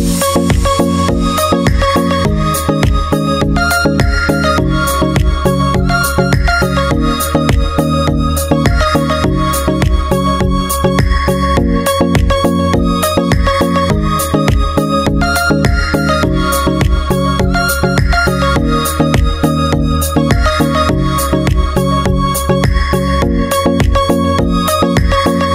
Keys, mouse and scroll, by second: 0.6-3.5 drag, 4.7-6.4 drag, 6.8 KP_Decimal, 8.7-9.8 drag, 10.1-12.0 drag, 16.4-17.8 drag, 18.3-19.4 drag, 21.5-23.4 drag, 23.4 click.